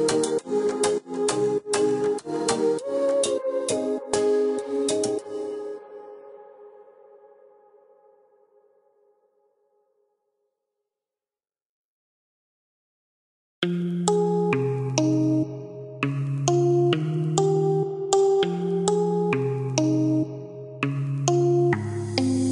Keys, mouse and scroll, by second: 0.3-0.7 scroll up 1, 1.4-1.8 scroll down 1, 3.0 click, 4.0 click, 7.4 click, 8.1-8.4 scroll up 1, 9.2-9.7 scroll down 1, 10.1 click, 10.9 click, 12.1 click, 13.0 click, 14.0 click, 14.6-14.9 scroll up 1, 15.8 Escape, 16.5-16.9 scroll up 1, 16.9-17.4 scroll down 1, 20.3 click.